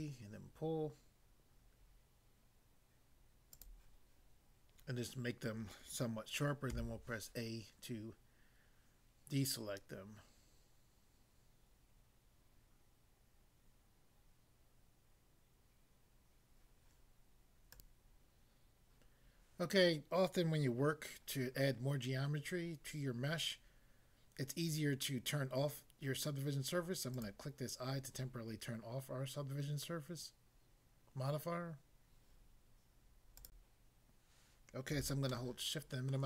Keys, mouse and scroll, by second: 3.5 click, 6.7 a, 17.7 click, 27.1 click, 33.4 click, 33.6 click, 35.3 shift+middle click.